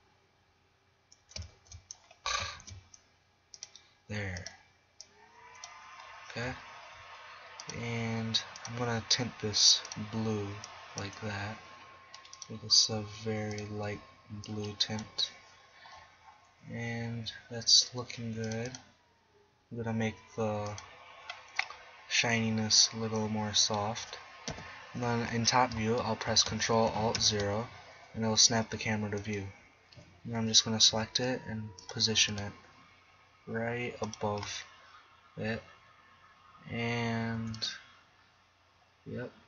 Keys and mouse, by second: 1.6 shift+s, 2.6 shift+a, 6.7-7.6 drag, 7.8 click, 8.2 drag, 10.4-12.4 middle drag, 14.5-16.1 middle drag, 18.5 click, 22.0 click, 22.8 click, 24.6 KP_7, 27.4 ctrl+alt+KP_0, 29.2-31.1 right drag, 31.1 g, 32.0 click, 32.2 g, 32.6 drag, 33.8 middle click, 34.2 click, 34.9 click, 35.4 click, 37.4 g.